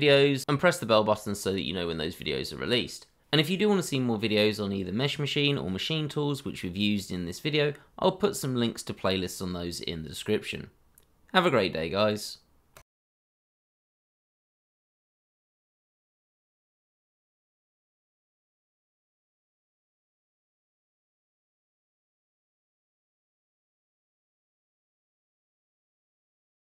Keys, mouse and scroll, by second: 1.3 KP_1, 2.1-2.4 scroll down 1, 2.7 middle click, 3.1 shift+middle click, 3.6-3.9 scroll up 1, 4.2-4.7 shift+scroll up 2, 5.2 shift+middle click, 10.4-11.1 scroll down 1, 11.2 middle click.